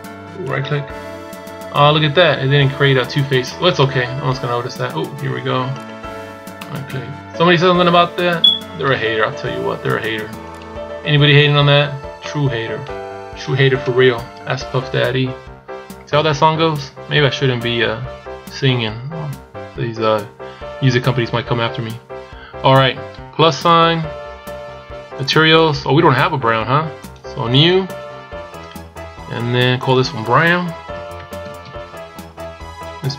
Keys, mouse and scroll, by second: 0.8 scroll up 3, 3.2 scroll down 2, 3.6 middle click, 5.5 shift+right click, 6.4 middle click, 8.9 scroll up 2, 10.2 shift+right click, 11.7 scroll down 3, 12.0 middle click, 12.8-13.4 scroll down 1, 13.5 KP_1, 14.7-15.1 scroll down 2, 16.2 scroll down 1, 16.9-19.4 scroll up 4, 23.5 click, 25.0 click.